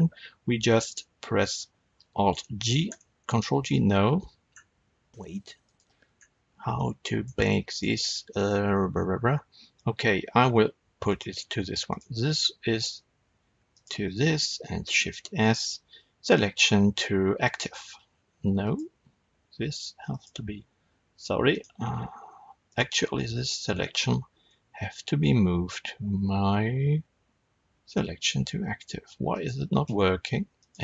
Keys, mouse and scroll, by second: 2.3 alt+g, 2.8 ctrl+g, 4.4-5.0 scroll up 1, 5.0-5.4 scroll down 1, 5.6 click, 6.1-6.7 scroll up 1, 6.7-7.6 middle drag, 7.6 click, 11.0 click, 11.8 click, 13.6 shift+click, 14.8 shift+s, 18.5 click, 20.0 shift+click, 21.4 click, 22.6 click, 23.4 shift+click, 24.5 shift+s, 30.5 click.